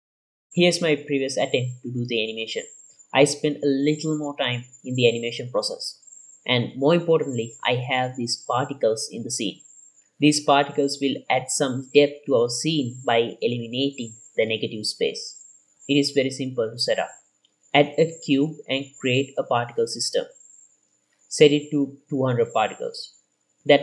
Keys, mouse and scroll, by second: 0.0-8.0 drag, 8.3 ctrl+s, 9.3-9.7 scroll up 4, 9.7-10.0 middle drag, 10.3-10.8 shift+middle drag, 11.1 click, 11.8 z, 13.9-14.4 scroll up 3, 14.4-14.8 shift+middle drag, 14.8-16.0 scroll up 1, 16.0-16.3 scroll up 1, 16.7 scroll down 2, 16.8-17.6 shift+middle drag, 18.0 shift+middle click, 19.3 click, 20.1-21.2 drag, 23.2 click.